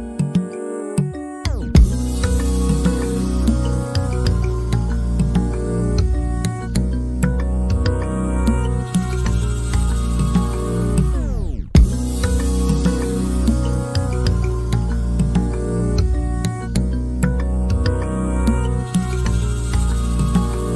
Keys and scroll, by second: 2.8 typing, 4.3-6.9 typing, 13.6 m, 16.2 l.